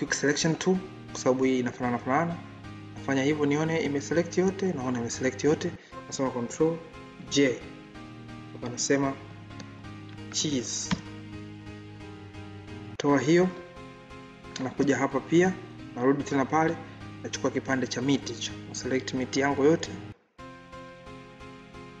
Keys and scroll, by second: 7.1 ctrl+j.